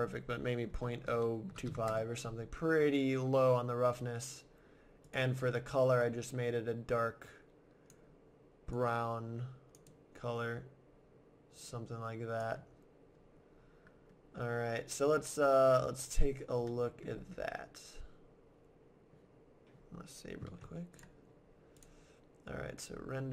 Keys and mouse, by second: 5.0-6.9 right drag, 13.9-20.3 middle drag, 20.5 ctrl+s, 21.7-22.9 drag.